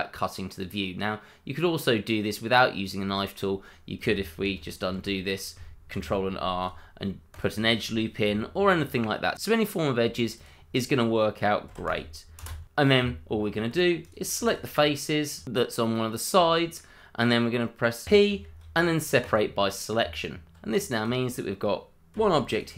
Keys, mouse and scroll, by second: 2.3 scroll up 1, 2.6 middle click, 3.2 shift+middle click, 4.5 ctrl+z, 5.9 ctrl+r, 6.6 click, 9.3 ctrl+z, 10.0 k, 10.3 click, 11.7 c, 11.8 click, 12.4 space, 12.9 Tab, 13.6 click, 13.9 shift+click, 14.1 middle click, 14.6 shift+click, 14.8 shift+double click, 15.0 middle click, 15.4 shift+click, 15.5 click, 15.8 middle click, 17.0 shift+middle click, 17.0 middle click, 17.1 shift+middle click, 18.0 p, 19.2 click, 20.0 Tab, 21.0 click, 22.1 g, 22.5 click.